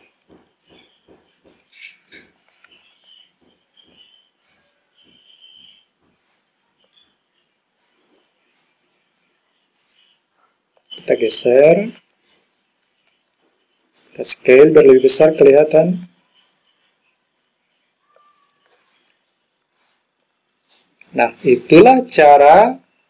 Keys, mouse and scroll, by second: 10.9 click, 12.2 click, 14.9 s, 18.2 click, 20.3-22.0 drag.